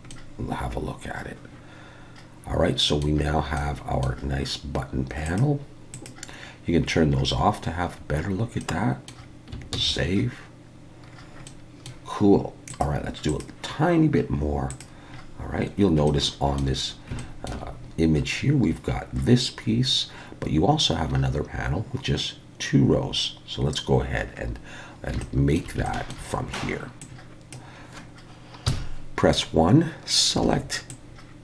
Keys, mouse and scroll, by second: 0.1 middle click, 3.6 middle click, 5.3 click, 5.9 click, 6.8-7.2 scroll down 2, 7.4-8.6 scroll up 5, 8.6 middle click, 10.5 ctrl+s, 11.1-11.5 scroll down 3, 11.5 middle click, 12.7 click, 13.3 click, 14.7 click, 15.1-15.8 scroll down 2, 15.8 scroll up 4, 16.1 shift+middle click, 16.9 scroll up 2, 17.2 shift+middle click, 24.2-25.1 scroll down 4, 25.1 scroll down 1, 25.2 shift+middle click, 25.9 shift+middle click, 27.0 click, 28.7 KP_1, 30.4 alt+a, 30.9 click.